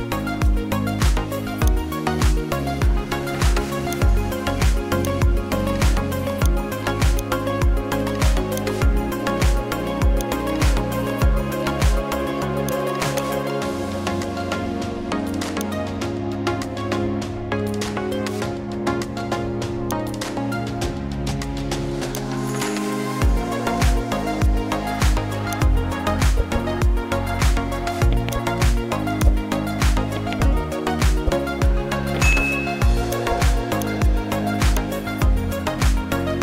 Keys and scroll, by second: 32.3 ctrl+z.